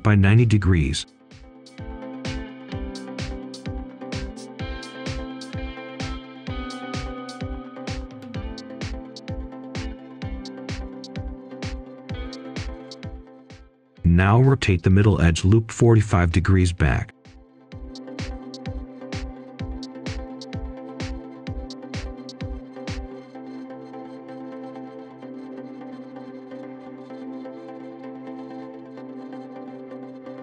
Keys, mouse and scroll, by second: 1.1 typing, 1.3 Return, 3.2 click, 3.5-3.9 scroll down 1, 4.9 shift+click, 7.9 shift+click, 8.6 click, 10.9 ctrl+a, 11.2 typing, 11.7 Return, 12.3 click, 13.4-13.8 scroll up 1, 13.8 right click, 14.5-14.8 scroll up 1, 15.2 ctrl+shift+click, 16.0-16.4 scroll down 1, 16.4-16.9 scroll up 1, 17.7 ctrl+shift+click, 20.0 right click, 20.3-21.3 scroll up 1, 21.1-22.0 typing, 23.7-25.1 scroll up 1, 25.1 click, 25.3-25.9 scroll down 1, 28.5 shift+click, 29.7-30.4 typing.